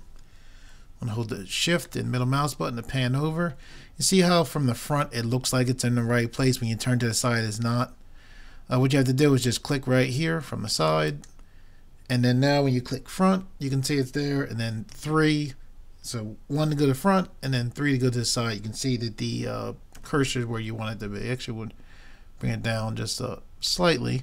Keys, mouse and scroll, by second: 11.1-12.8 right drag, 13.2 KP_1, 15.0 KP_3, 16.6 KP_1, 17.8 KP_3, 20.0 KP_1, 23.7-24.2 right drag.